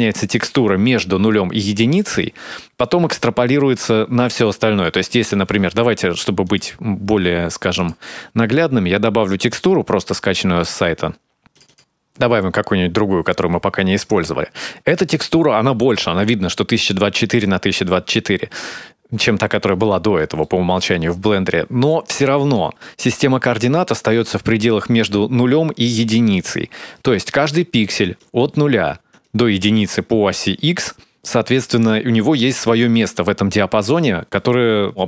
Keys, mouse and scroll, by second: 7.4 click, 13.6-14.5 scroll down 7, 14.5-14.9 scroll up 2, 14.9-15.6 scroll down 2, 19.7-20.9 scroll up 2, 20.9 scroll up 2, 21.4 shift+middle click, 23.7 scroll up 1, 29.2 right click, 30.1 right click.